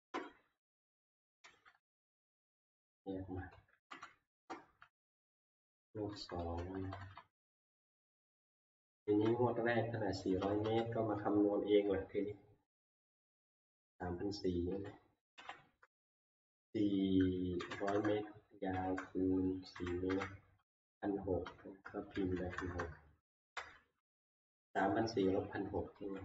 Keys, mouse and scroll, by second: 0.1 Right, 0.6 Left, 1.2 Up, 1.4 ctrl+c, 1.7 Down, 1.7 Right, 1.8 Down, 2.0 Down, 2.2 Down, 2.4 Down, 2.6-3.3 Down, 4.4 shift+Return, 6.1 shift+Right, 6.4 Up, 6.5 shift+Right, 6.6 shift+Right, 6.7 Up, 6.8 shift+Right, 6.8 shift+Right, 7.0 shift+Right, 7.1 shift+Right, 7.4 shift+Right, 7.9 Down, 8.2 Left, 8.5 Left, 8.7 Left, 8.9 Left, 8.9 Up, 9.5 Up, 16.4-20.6 typing, 21.9-24.2 typing, 24.4 Down, 24.6 Down, 24.9 Down, 25.1 Down, 25.3 Down, 25.5 Down, 25.7 Down, 25.9 Down.